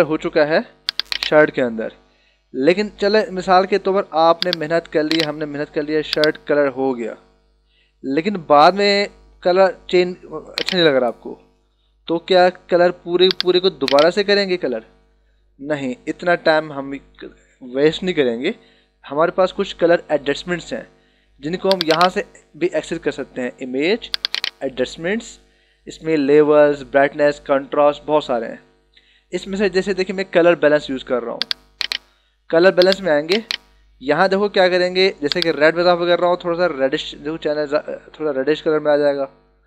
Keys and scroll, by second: 0.8 h, 3.1 ], 13.0 [, 14.9 ctrl+-.